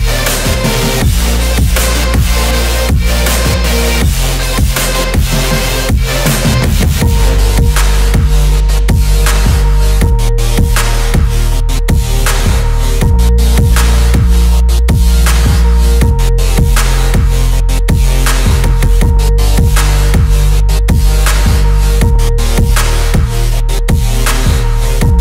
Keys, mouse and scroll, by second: 0.4 middle click, 2.0 click, 3.6 shift+click, 4.1 shift+click, 4.6 shift+click, 5.2 shift+click, 5.8 shift+click, 6.4 shift+click, 6.8 shift+click, 7.3 shift+click, 11.9 shift+click, 12.8 shift+click, 14.8 shift+click, 15.3 shift+click, 15.7 shift+click, 16.1 shift+click, 16.8 shift+click, 17.3 shift+click, 17.7 shift+click, 18.3 shift+click, 19.5 shift+click, 20.0 shift+click, 20.8 shift+click, 21.8 shift+click, 22.6-23.9 middle drag, 24.1-24.8 scroll down 1.